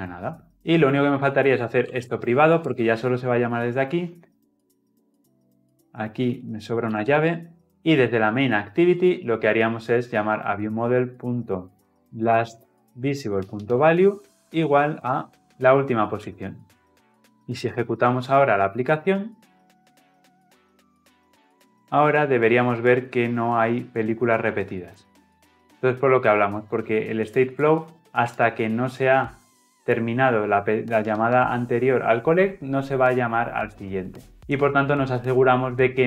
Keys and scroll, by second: 2.5 Return, 7.7 ctrl+alt+o, 13.0 Return, 15.2 Delete, 17.5 shift+F10.